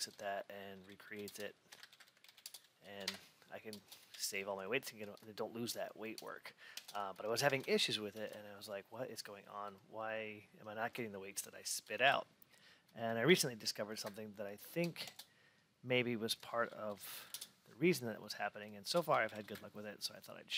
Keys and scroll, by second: 1.6 BackSpace, 2.9 Return, 4.0 alt+w.